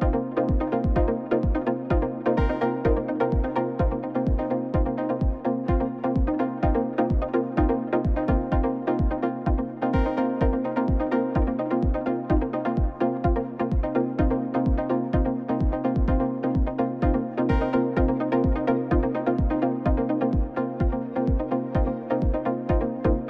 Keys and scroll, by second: 0.2 ctrl+z, 3.0 1, 3.1 Return, 4.7 alt+a, 6.0 Tab, 7.0 Tab, 8.2 ctrl+a, 8.5 Tab, 8.7 alt+a, 9.0 c, 9.7 Return, 10.0 s, 10.2 z, 11.1 Tab, 11.5 alt+a, 18.7 ctrl+s, 19.8 7, 20.7 g, 22.6 ctrl+alt+0.